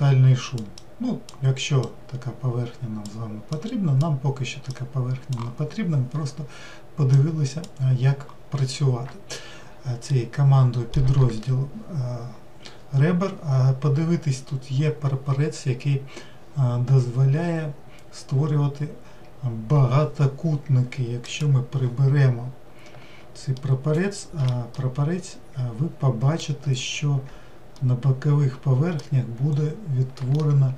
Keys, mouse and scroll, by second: 24.8-30.7 middle drag.